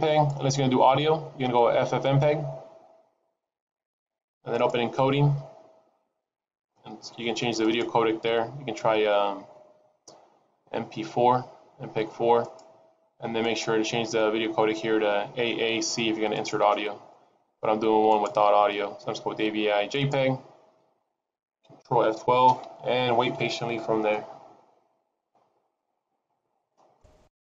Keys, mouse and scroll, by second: 0.1 click, 3.6-4.5 scroll down 1, 4.5 click, 5.1-6.0 scroll down 2, 6.7-7.6 scroll down 1, 7.6 click, 7.6-9.2 scroll down 3, 13.4 click, 18.1 click, 18.1-18.7 scroll up 2, 20.9-22.3 scroll up 3.